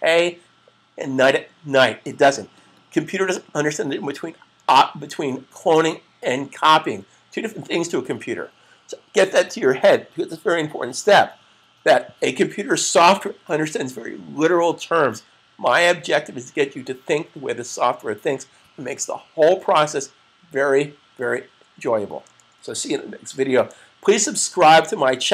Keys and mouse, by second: 3.1 click.